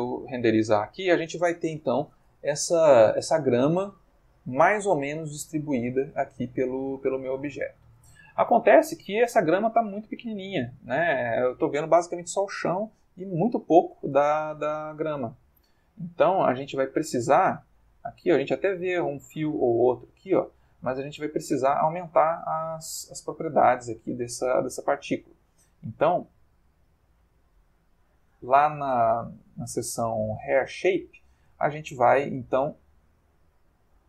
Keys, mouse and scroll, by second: 10.7-11.9 ctrl+middle drag, 12.0-12.6 ctrl+middle drag, 12.8-13.4 ctrl+middle drag, 13.7 ctrl+middle click, 15.2 click, 15.9 alt+Tab, 17.2 ctrl+middle click, 19.1 ctrl+middle click, 19.6 ctrl+middle click, 21.0 click, 22.5 click, 24.8 click, 25.4 middle click, 26.3 middle click, 27.7-29.0 middle drag, 29.1 middle click, 30.5 click, 30.8 middle click, 33.1-34.0 drag.